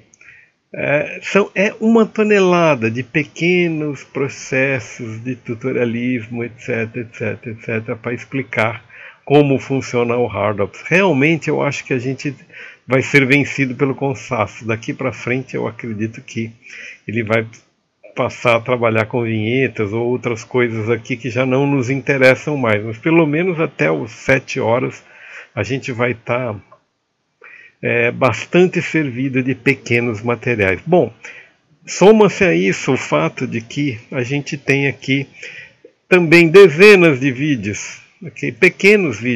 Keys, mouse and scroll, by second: 0.0-0.5 typing, 0.0 click, 0.3 middle click, 0.7 middle click, 0.8 scroll up 1, 1.0 middle click, 1.3 click, 1.5 middle click, 1.7 scroll up 1, 1.9-4.2 typing, 2.1 click, 2.2 middle click, 2.4 alt+a, 2.5 shift+click, 3.2 click, 3.9 middle click, 4.4 click, 4.8 click, 5.5 scroll down 1, 5.7 click, 6.1 q, 6.4 click, 6.5 middle click, 7.0 middle click, 7.4 s, 7.5 scroll up 1, 7.9 middle click, 8.2 click, 8.5 ctrl+z, 8.6 right click, 8.9 middle click, 9.0 click, 9.5 middle click, 9.9 s, 10.1 shift+middle click, 10.4 middle click, 10.6 click, 11.2 middle click, 11.3 click, 11.7 click, 12.1 right click, 12.3 ctrl+click, 13.7 middle click, 14.1-14.8 scroll up 6, 15.2 scroll up 1, 15.3 click, 15.4 q, 15.6 middle click, 15.7 i, 15.9 right click, 16.6 click, 16.7 scroll up 3, 16.9 click, 17.6 q, 18.4 click, 18.7 d, 20.0 click, 22.2 middle click, 22.6 d, 24.4 click, 25.2 click.